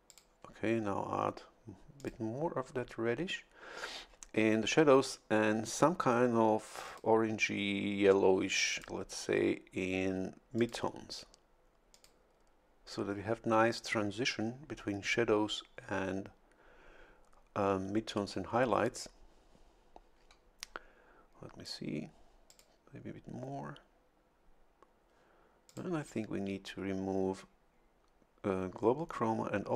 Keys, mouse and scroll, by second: 0.1 click, 2.0 click, 6.9 click, 8.7 click, 10.6 click, 11.9 click, 22.5 click, 25.7 click.